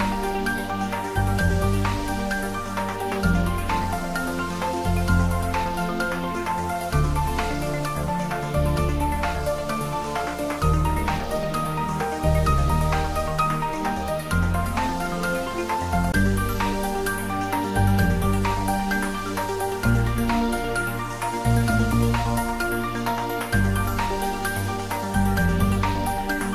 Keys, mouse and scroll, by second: 0.8-1.5 scroll down 1, 4.0-7.9 middle drag, 8.9 click, 10.2 Tab, 12.0 click, 12.6 Tab, 13.3-13.7 scroll up 1, 16.1-16.6 scroll up 1, 16.6-18.2 middle drag, 20.5 alt+shift+click, 23.0 alt+shift+click.